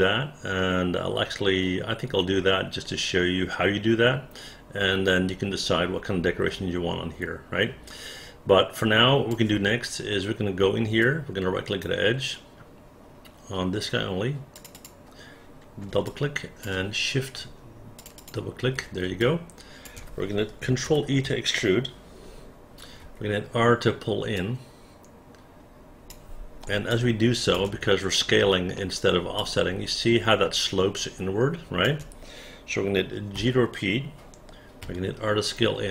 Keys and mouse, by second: 11.1 right click, 14.6 click, 14.8 click, 16.2 alt+click, 18.1 shift+click, 18.2 shift+click, 19.3 alt+click, 21.0 ctrl+e, 23.1 r, 24.4-26.2 drag, 27.0 alt+click, 28.8 alt+middle click, 29.5-31.9 alt+drag, 33.4 g, 34.9 r.